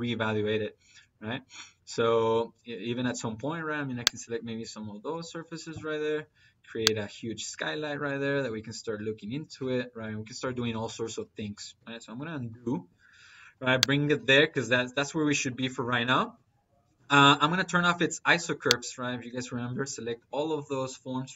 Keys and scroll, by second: 12.0 ctrl+z.